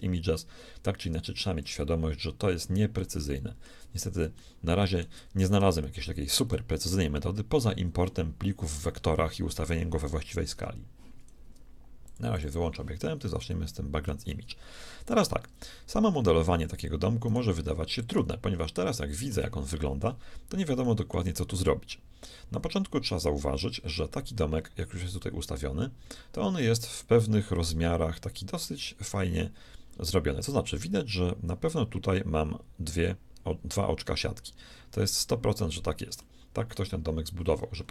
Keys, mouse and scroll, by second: 5.6-10.8 shift+middle drag, 12.0-14.0 drag, 13.6-15.4 shift+middle drag, 17.2 right click, 17.7 x, 27.0-29.0 drag, 36.3-37.9 shift+middle drag.